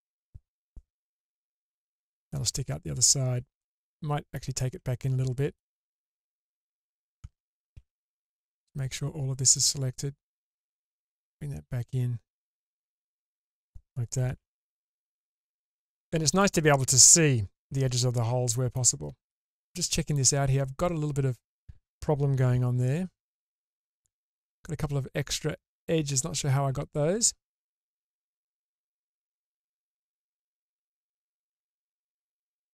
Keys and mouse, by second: 1.1 /, 2.3 click, 2.5-3.1 middle drag, 3.7-4.3 middle drag, 4.3 click, 4.6 click, 4.7 alt+middle click, 6.2 alt+middle click, 7.7 alt+z, 8.5-9.5 drag, 10.5-12.4 drag, 12.7 middle click, 14.3 alt+z, 14.7-16.4 middle drag, 17.0-18.0 middle drag, 18.5 middle click, 19.5 middle click, 22.6 Tab, 23.7 Tab, 24.6 alt+middle click, 29.3 ctrl+z, 31.1 ctrl+z, 31.5 ctrl+x.